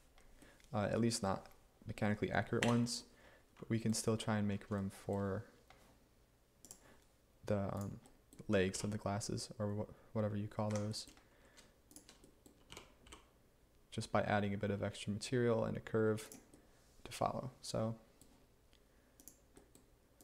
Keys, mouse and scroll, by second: 2.7 Tab, 8.8 g, 10.8 Escape, 12.8 g, 13.1 y, 17.5 g.